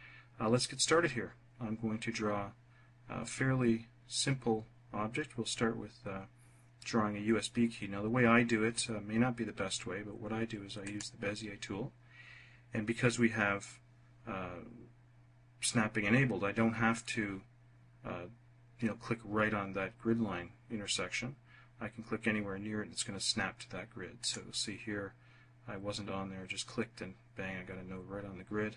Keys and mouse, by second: 10.8 click, 24.1 click.